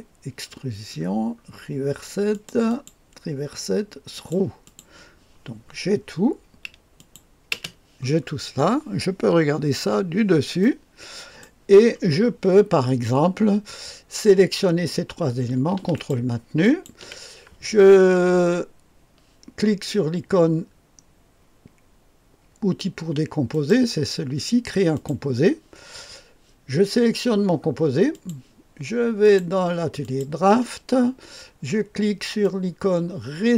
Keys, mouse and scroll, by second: 1.0-1.6 scroll up 1, 2.3 click, 2.7 click, 4.1 click, 4.6 click, 5.0-5.4 drag, 6.9 click, 7.7 space, 8.2-9.7 scroll down 1, 9.7 KP_2, 10.5 click, 11.4-13.8 right drag, 15.9-17.5 ctrl+drag, 23.5 click, 24.9 click, 28.1-29.5 drag, 30.0 click, 32.4-33.5 drag.